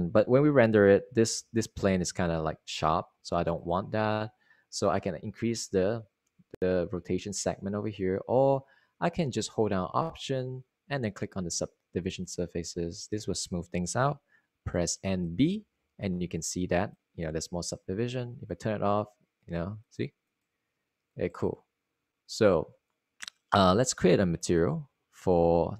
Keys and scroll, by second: 2.4 super+r, 15.9-16.9 typing.